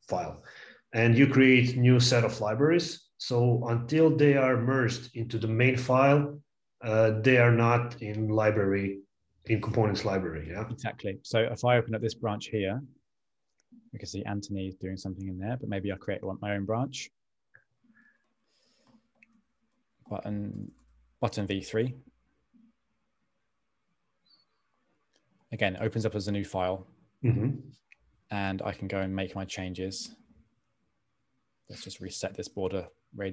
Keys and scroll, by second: 18.7-22.1 typing, 33.1 Return.